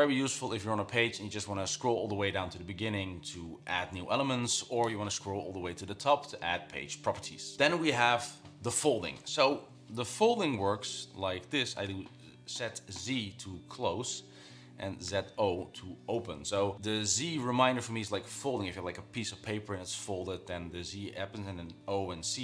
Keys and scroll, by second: 10.3-12.6 typing, 14.8-15.8 typing.